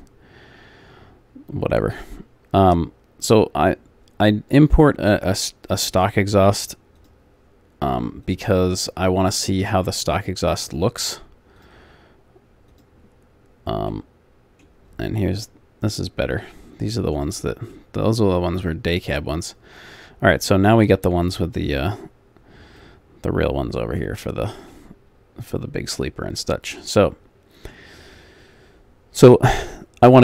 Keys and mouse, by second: 1.5-2.9 middle drag, 3.2 middle click, 6.0-10.2 drag, 13.1 click, 13.9 middle click, 14.3 click, 14.4 middle click, 17.3 click, 17.9 middle click, 19.7 middle click, 23.7 middle click, 25.2 middle click.